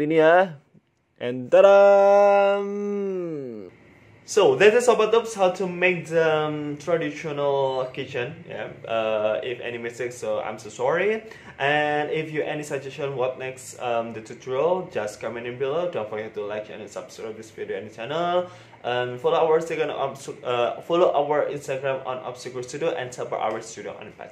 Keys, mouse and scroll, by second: 0.4 scroll down 2, 1.3 scroll down 1, 3.0 ctrl+s.